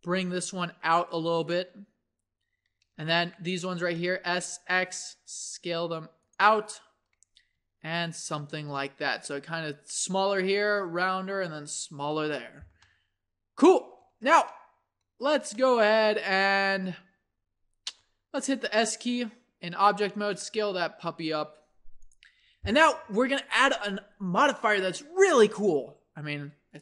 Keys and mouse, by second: 1.4-3.0 right drag, 3.0-6.2 drag, 3.8 s, 7.6 Tab, 8.4 Tab, 8.8 Tab, 12.8-17.4 middle drag, 18.4 s.